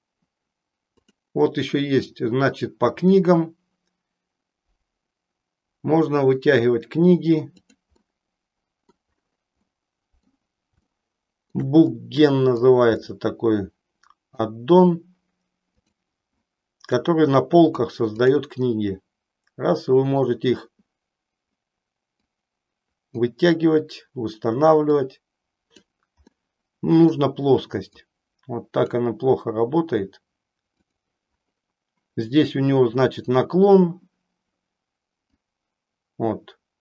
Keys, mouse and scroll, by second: 0.9 click, 4.5-7.9 drag, 8.1 middle click, 9.8 middle click, 10.8 shift+middle click, 12.0 middle click, 13.1-14.3 middle drag, 15.7-31.1 drag, 26.3-31.1 middle drag, 35.6-36.8 drag.